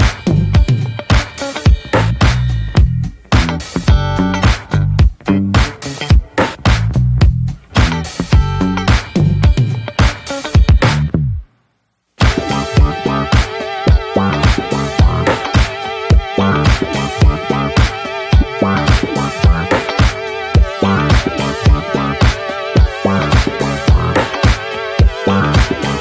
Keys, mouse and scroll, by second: 0.1 click, 0.4-2.0 middle drag, 2.0 ctrl+s, 2.2 middle click, 2.4-2.9 scroll up 3, 2.5 middle click, 2.9 Tab, 3.3 shift+middle click, 3.4-3.9 shift+scroll up 2, 3.9 click, 4.2 l, 5.8-7.5 middle drag, 7.5 Tab, 7.6 click, 7.8 scroll down 1, 7.9 middle drag, 8.1 scroll up 2, 8.4-9.6 middle drag, 9.6 ctrl+s, 9.7-10.0 scroll down 3, 10.0-10.6 shift+middle drag, 10.6 scroll down 2, 10.8-12.5 middle drag, 12.5-13.5 drag, 13.5 scroll down 2, 13.6-13.9 shift+middle drag, 13.9 scroll up 1, 14.2 ctrl+s, 15.4 click, 16.6 middle click, 16.8 click, 16.9 scroll down 1, 17.1-17.5 shift+middle drag, 17.5 ctrl+s, 18.1 middle drag, 18.3-18.7 scroll up 2, 18.4 shift+middle click, 18.7-19.3 middle drag, 19.3-19.6 scroll up 1, 19.6-21.2 middle drag, 21.2 ctrl+s, 21.7 click, 21.8 shift+middle drag, 23.2 alt+z, 24.0 click, 24.2 alt+z, 24.4-24.8 scroll up 1, 24.8 alt+z, 25.5 shift+d.